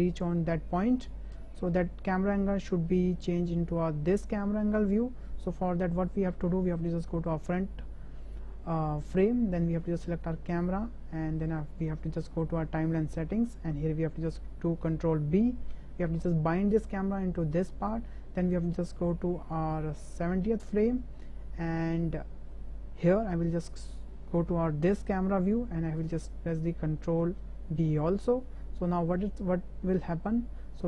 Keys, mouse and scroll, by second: 1.3 space, 4.1 click, 6.8 click, 10.5 click, 11.4 click, 15.4 ctrl+b, 17.9-21.8 drag, 23.4 click, 24.9 ctrl+KP_0, 28.2 ctrl+b, 29.3-30.7 drag.